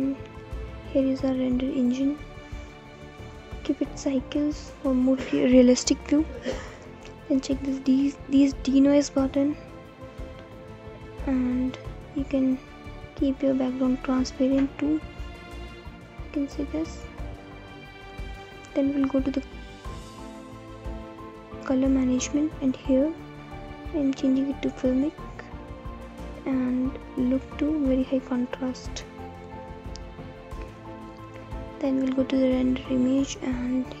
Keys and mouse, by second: 1.7 click, 5.4 click, 17.2 right click, 22.4 click, 24.5-26.3 drag, 28.3-29.7 drag, 33.0-34.0 drag.